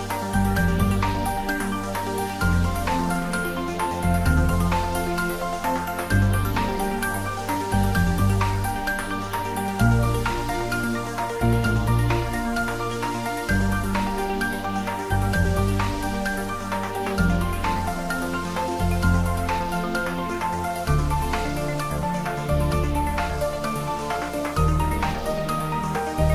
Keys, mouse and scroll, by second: 0.8 click, 7.6 click, 12.4 click, 20.0 click, 23.6 click.